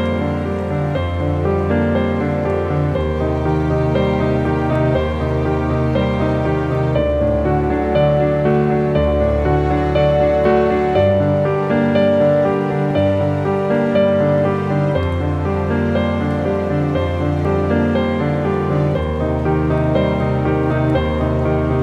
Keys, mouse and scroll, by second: 0.9 click, 6.4 click, 12.2 click, 13.3 right click, 18.6 click, 20.5 ctrl+shift+i, 20.9 ctrl+d, 21.5 ctrl+click.